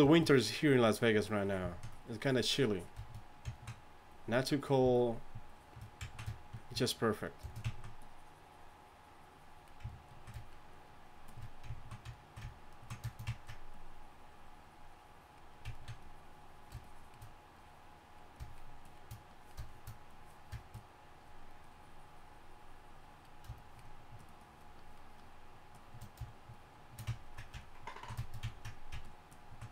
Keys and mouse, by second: 1.7-3.6 drag, 6.7-9.9 drag, 10.4-13.1 drag, 13.7-15.7 drag, 16.0-27.1 drag, 27.9-28.5 drag.